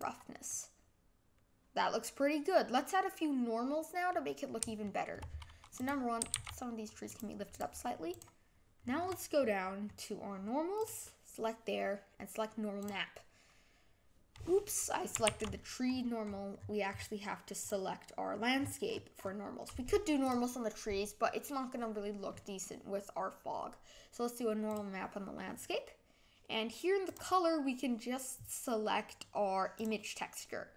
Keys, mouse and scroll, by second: 0.4-3.5 middle drag, 4.8-5.8 shift+middle drag, 5.8 click, 6.2 g, 7.6 click, 8.2 click, 12.9-14.6 drag, 15.3 ctrl+z, 17.4-17.7 scroll up 10, 17.7 click, 24.8 click, 29.9 click.